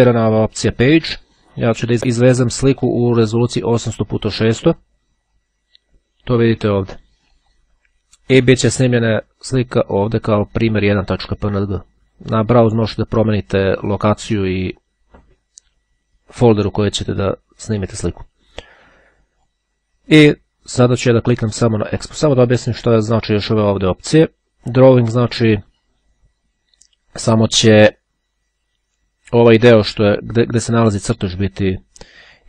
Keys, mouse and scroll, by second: 6.7 click, 7.5 click, 9.5-10.5 drag, 11.5 click, 18.8-20.1 drag, 24.5 click.